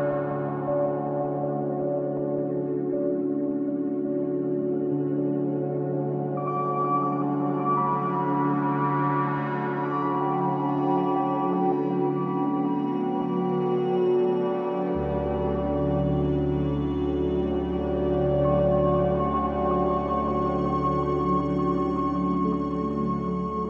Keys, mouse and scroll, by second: 3.4-4.8 drag, 4.8-5.2 scroll down 4, 5.8-7.2 drag, 7.2 KP_0, 9.3 click, 11.6-22.5 drag.